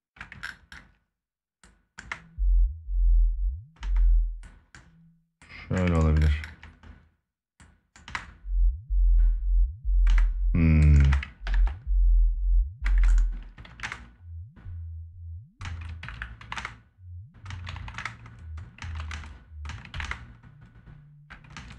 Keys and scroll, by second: 1.7 space, 3.5 space, 7.7 space, 9.8 space, 11.2 ctrl+s, 12.6 space, 13.4 ctrl+Up, 13.5 space, 15.4 space, 16.3 space, 18.5 space, 18.8 space, 19.7 space, 21.3 space.